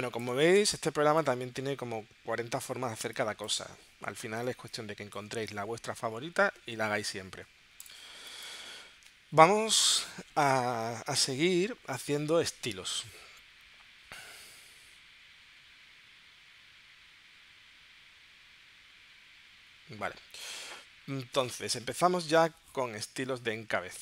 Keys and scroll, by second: 0.3 space, 0.6 space, 2.9 space, 4.5 space, 8.0 space.